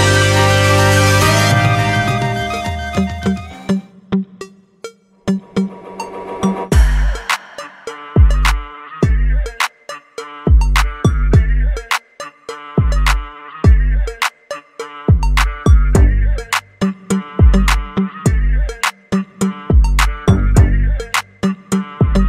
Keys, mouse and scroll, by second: 0.6-3.2 drag, 12.2-14.7 drag, 15.9-17.6 drag, 21.4 middle click.